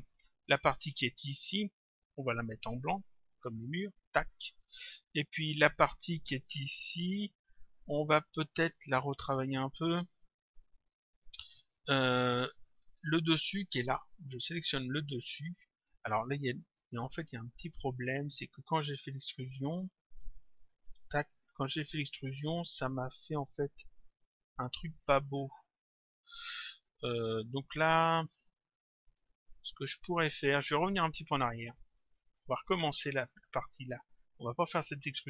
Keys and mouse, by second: 0.8 click, 2.7 click, 12.8 click, 14.5 click, 17.7 click, 20.9 d, 24.3 click, 31.7 click.